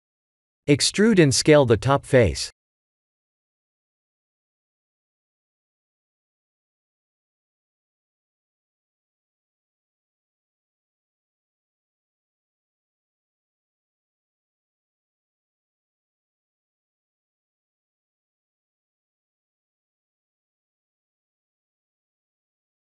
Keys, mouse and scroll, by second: 0.5 middle click, 1.5 Tab, 2.0 3, 2.2 click, 2.5 click, 3.4 e, 7.9 middle click, 9.1 click, 9.6 shift+middle click, 10.7 click, 12.1-12.4 scroll down 2, 12.4 middle click, 13.0-13.3 scroll down 2, 13.5 shift+middle click, 14.6 middle click, 15.4 middle click, 16.7-17.3 scroll up 4, 17.4 shift+middle click, 18.7 click, 20.3 Tab, 20.9 click, 21.7 click.